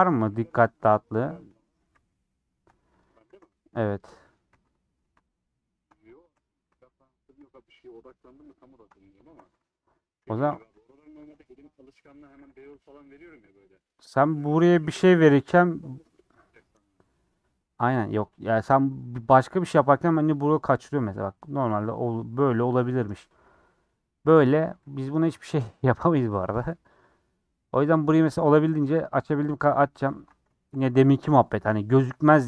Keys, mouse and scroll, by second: 0.0-0.4 typing, 0.7 click, 1.4 shift+click, 2.0 ctrl+s, 2.5 ctrl+x, 3.0 click, 3.3 ctrl+x, 3.9 middle click, 5.1 click, 7.5 x, 7.7 middle click, 8.7 click, 10.6 3, 10.7-11.9 drag, 11.9 middle click, 12.4 2, 12.5 click, 12.7 f, 13.2-14.6 middle drag, 14.6 f, 15.0 f, 16.0 scroll down 1, 16.2-19.4 middle drag, 19.4 scroll down 2, 19.7-21.3 middle drag, 21.3 scroll up 1, 21.8-23.2 middle drag, 23.2 scroll down 2, 24.3-25.3 scroll down 1, 25.3 scroll down 2, 25.4 middle click, 25.9 scroll up 1, 26.1 alt+z, 26.5 alt+z, 26.7 scroll down 3, 26.9 middle click, 27.4 scroll down 1, 27.6-29.2 middle drag, 29.2 click, 30.6 shift+middle click, 31.2 ctrl+click, 31.3-32.4 middle drag.